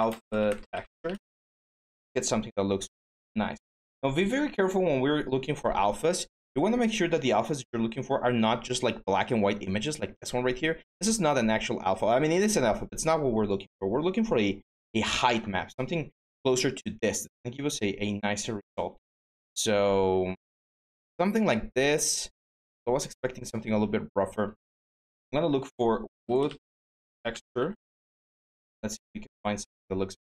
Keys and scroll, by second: 0.0-1.1 typing, 4.7-5.4 typing, 25.7-27.8 typing.